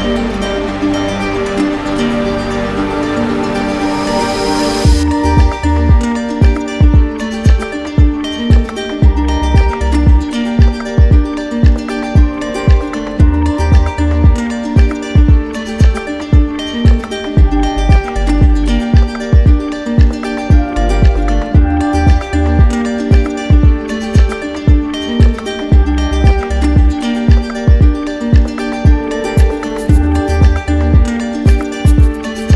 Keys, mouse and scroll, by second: 0.1 shift+click, 0.3 shift+click, 0.6 shift+click, 1.2 right click, 2.6 click, 3.8 right click, 4.5 shift+click, 5.5 right click, 6.0 ctrl+z, 6.8 alt+click, 7.0 right click, 8.2 right click, 8.8 shift+click, 9.3 shift+click, 10.0 right click, 10.5 right click, 10.7 click, 11.2 click, 11.7 click, 13.1 alt+click, 13.2 alt+click, 13.5 click, 14.4 shift+click, 15.3 alt+right click, 16.1 right click, 17.0 right click, 17.8 right click, 19.2 shift+click, 19.6 ctrl+z, 20.7 shift+click, 21.1 shift+click, 21.7 shift+click, 22.0 shift+click, 22.6 right click, 23.0 shift+click, 23.7 alt+click, 26.5 shift+click, 27.3 alt+click, 28.7 click, 30.8 click, 31.2 shift+click.